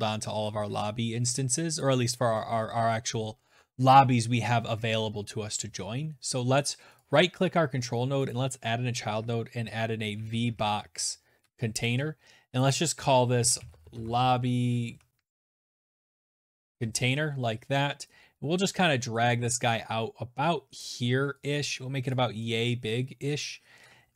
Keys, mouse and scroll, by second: 6.0 right click, 7.4 click, 9.0-10.4 typing, 10.5 Return, 11.7 click, 12.2-16.2 typing, 17.9 click, 19.8 click, 21.2 click, 21.7 scroll up 1.